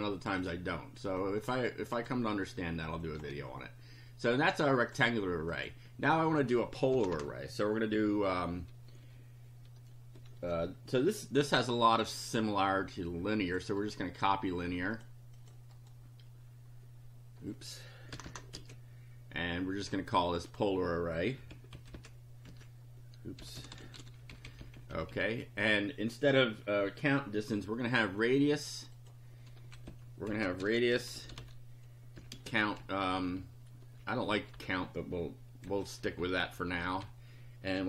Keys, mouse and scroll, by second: 0.5 click, 1.2 click, 2.0 click, 3.0 click, 4.6 click, 5.5 click, 6.9 Return, 12.7-13.7 drag, 13.8 right click, 14.9 click, 15.4 click, 15.8 right click, 18.1 Return, 18.6 ctrl+v, 20.3 click, 21.7 Left, 22.5 Right, 23.3-24.5 typing, 28.9 click, 30.3 Left, 30.4-32.3 typing, 32.8 Right, 35.7 Left, 36.1 Delete, 37.5-37.8 typing.